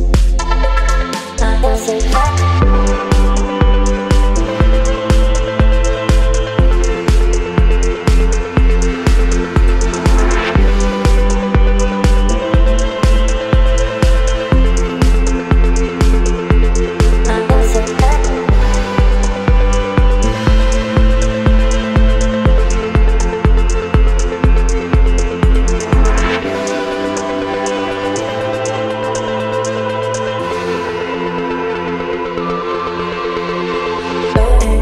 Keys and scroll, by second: 3.9 space, 5.5 t, 10.4-13.5 typing, 14.8 KP_Subtract, 15.1 KP_0, 15.5 KP_7, 16.2 ctrl+a, 27.6 space, 30.1 ctrl+a, 34.7 KP_9.